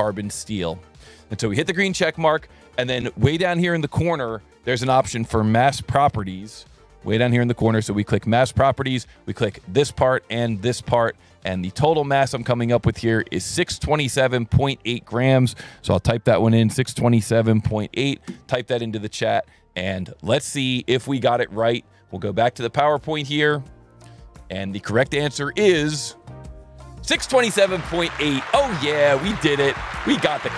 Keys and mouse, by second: 1.3 click, 2.6 click, 3.9 1, 4.9 click, 5.6 ctrl+shift+click, 7.1 alt+1, 8.2 click, 9.6 click, 10.3 click, 11.6 alt+1, 12.0 click, 12.6 click, 14.0 alt+1, 15.0 click, 16.0 KP_6, 17.5 KP_Decimal, 17.7 KP_8, 18.3 KP_Enter, 20.6 click, 21.2 click, 23.1 click, 25.5 click, 26.1 click.